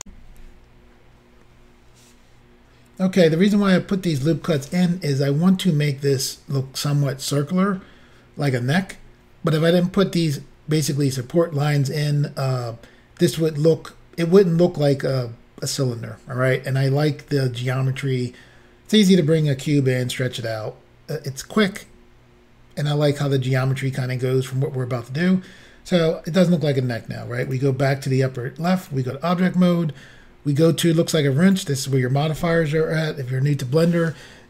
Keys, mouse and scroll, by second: 0.0 Insert, 27.5 click, 28.9 click, 31.5 click.